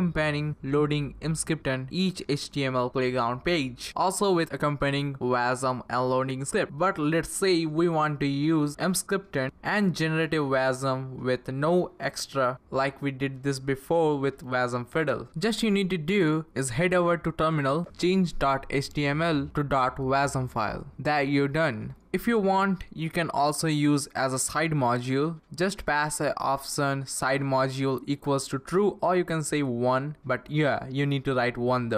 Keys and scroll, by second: 7.3 Up, 10.6 Down, 12.7 Page_Up, 14.2-17.0 typing, 21.8 Return, 22.7 Left, 22.8 Left, 23.1-27.8 typing, 29.0 BackSpace, 29.1 =, 29.5 1, 31.1-31.6 Right, 31.8 Return.